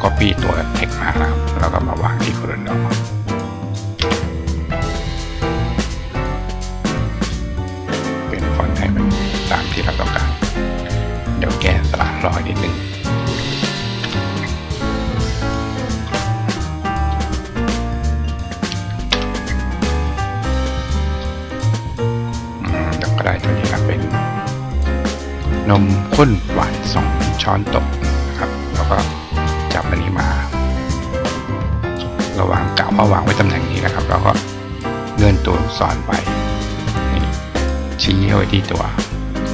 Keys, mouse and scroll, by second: 3.0 click, 5.2 click, 6.1 click, 7.8 click, 9.4 click, 11.8 click, 15.8 click, 16.8 click, 18.0 click, 20.9 click, 22.3 click, 23.5-24.6 drag, 28.2-29.3 drag, 29.8-31.8 drag, 31.6 right click, 33.6 click, 34.5-36.4 drag, 36.8 click, 37.4 click, 38.9 click.